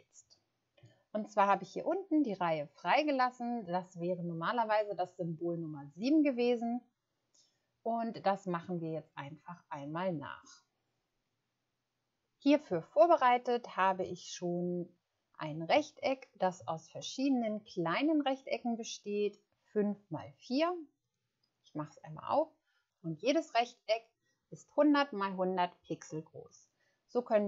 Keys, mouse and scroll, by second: 16.0 ctrl+scroll up 1.